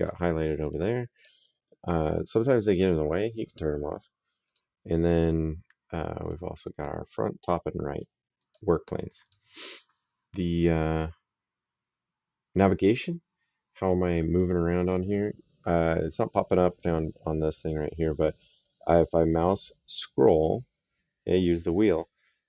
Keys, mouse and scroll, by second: 0.4 click, 3.1 click, 4.3 click, 6.0 click, 7.7 click, 13.7 middle click, 16.6 click, 18.1 middle click.